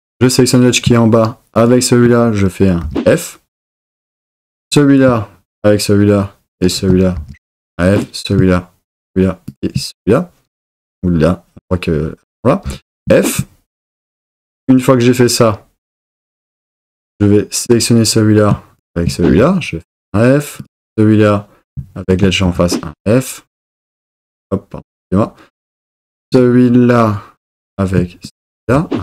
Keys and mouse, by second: 2.8 f, 5.5 shift+click, 7.1 f, 7.9 click, 12.6 f, 19.3 f, 22.1 shift+click, 22.5 f, 28.7 f.